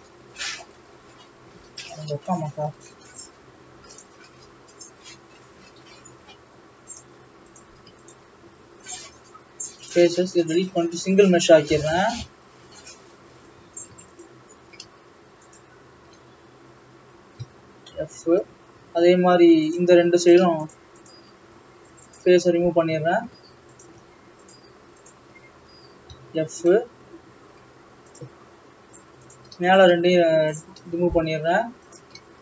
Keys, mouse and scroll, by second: 1.6 alt+a, 1.8-2.3 scroll up 1, 2.3 shift+middle click, 3.3 click, 4.0 x, 5.3-7.0 scroll down 1, 7.0 click, 7.6 click, 8.1 shift+click, 10.2 x, 10.3 scroll up 2, 10.7 scroll down 2, 11.9 click, 12.2 alt+a, 12.8 alt+click, 13.7 alt+a, 14.2 alt+shift+click, 15.6 alt+shift+click, 16.4-17.3 scroll down 1, 17.3 f, 18.6 middle click, 18.7 scroll up 3, 18.9 alt+a, 19.7 click, 20.8 shift+click, 21.1 shift+click, 22.2 x, 22.4-22.7 scroll up 3, 22.8 scroll down 2, 23.4 alt+a, 23.8 click, 24.5 alt+shift+click, 25.1 alt+shift+click, 25.5-26.0 scroll down 2, 26.0 f, 26.8 middle click, 27.2 scroll up 2, 28.1 click, 28.7-29.4 scroll down 2, 29.4 click, 29.8 shift+click, 30.7 x, 31.8 click.